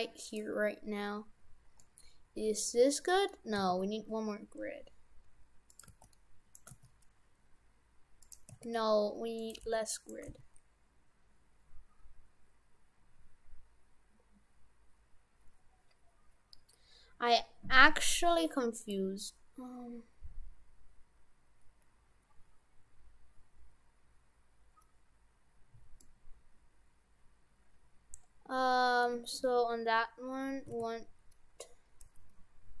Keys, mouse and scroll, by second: 1.9 middle click, 3.6 s, 5.9 g, 6.7 g, 8.5 s, 9.6 g, 10.3 g, 26.0 middle click, 30.7 s.